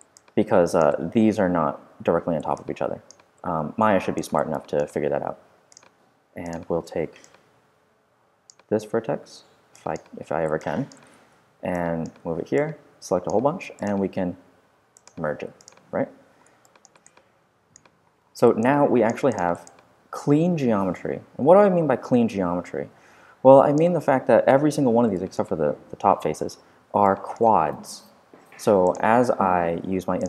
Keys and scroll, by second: 11.0 super+w, 11.3 v.